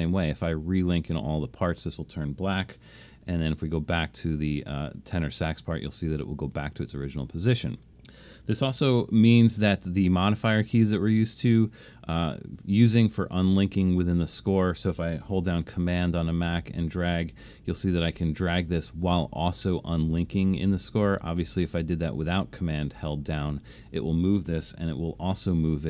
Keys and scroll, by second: 3.2 alt+super+/, 8.9 alt+super+/, 21.0 super+z, 25.0 alt+super+/.